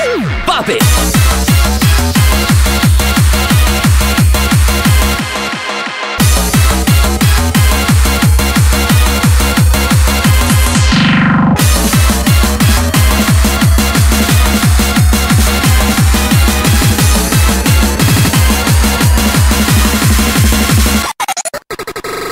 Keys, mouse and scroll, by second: 2.5-5.1 middle drag, 4.0 s, 5.2-6.4 drag, 5.6 s, 6.9 s, 8.1 s, 8.9 s, 9.8 s, 10.6 s, 11.7 click, 11.8 s, 13.0 s, 14.0 s, 15.0 s, 15.8 g.